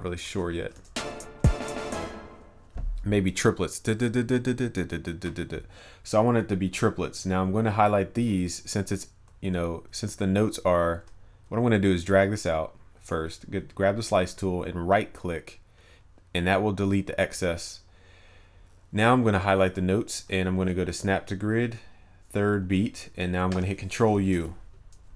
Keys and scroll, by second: 24.4 ctrl+u.